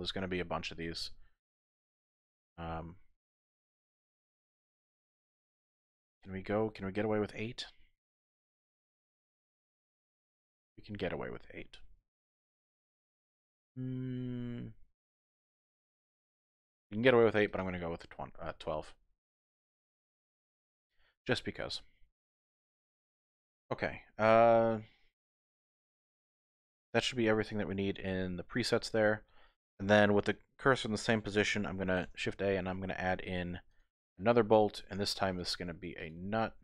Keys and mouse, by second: 3.6-5.7 middle drag, 8.3 click, 9.3 click, 10.0-13.7 middle drag, 15.7 click, 17.6 click, 18.2-19.6 middle drag, 20.7 shift+middle click, 21.3-28.5 middle drag, 32.0 shift+a, 35.4 click.